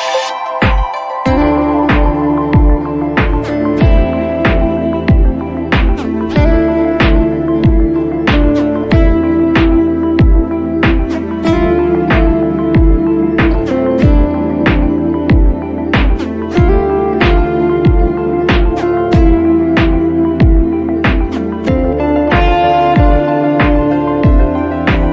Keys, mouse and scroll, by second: 3.5 click, 4.8-6.8 [, 7.0 [, 7.8 click, 12.6 click, 17.2 click.